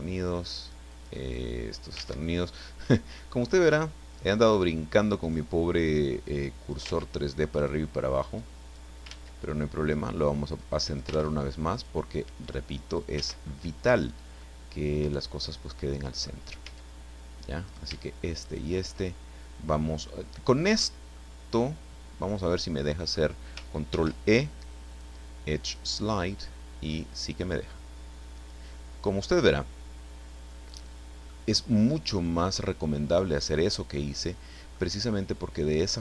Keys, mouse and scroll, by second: 0.2-1.2 ctrl+drag, 1.3 click, 2.0 ctrl+z, 3.2-4.5 drag, 4.6 scroll up 2, 5.2 right click, 6.3 click, 6.9 ctrl+z, 7.5 right click, 8.4 click, 9.1 ctrl+z, 9.9 right click, 10.6 click, 11.1 ctrl+z, 11.7 right click, 12.4 click, 13.2 ctrl+z, 13.6 scroll down 2, 14.4-16.4 middle drag, 16.6 a, 17.6 shift+right click, 18.4 shift+right click, 21.1-23.3 drag, 23.9 ctrl+e, 25.6 click, 28.3 click, 29.0-29.4 scroll down 1, 29.4-31.4 middle drag, 31.4-32.2 scroll up 1, 32.2-34.9 middle drag.